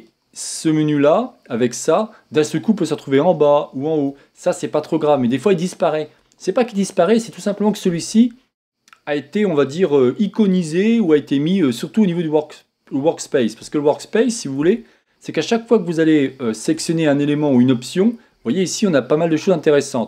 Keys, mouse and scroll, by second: 14.7 Tab.